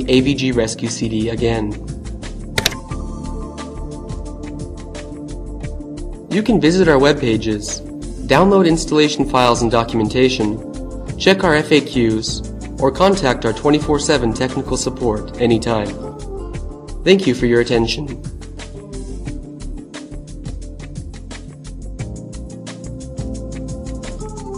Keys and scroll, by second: 1.2 Return.